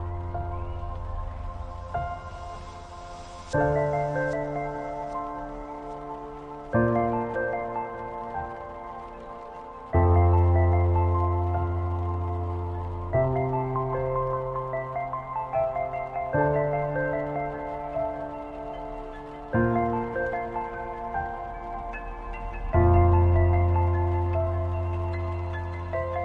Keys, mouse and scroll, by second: 3.6 click, 5.9 click, 12.4 click, 23.9-26.0 drag, 26.0-26.2 scroll down 3.